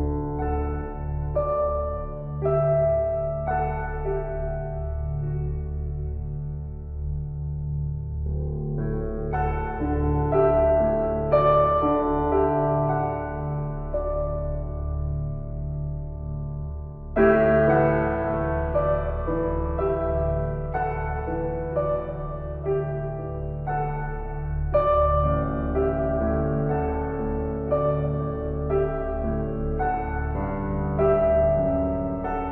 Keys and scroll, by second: 10.7 ].